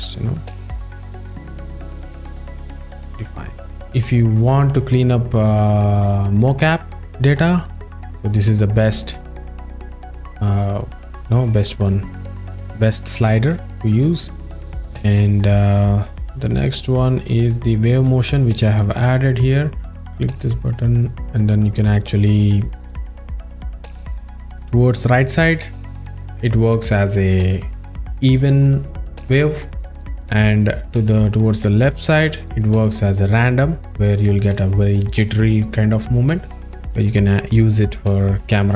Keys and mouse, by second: 3.5 click, 4.6 z, 7.7 click, 18.7 click, 20.0 z, 20.1-20.5 drag, 38.6 right click.